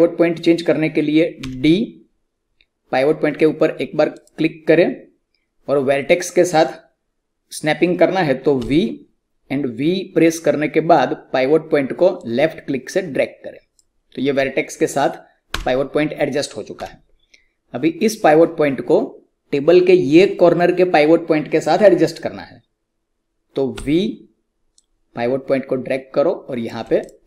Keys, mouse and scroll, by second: 1.3 d, 4.1 click, 8.5-13.4 typing, 12.1 click, 15.4 d, 16.7 w, 19.0 typing, 23.7-25.6 typing, 27.0 click.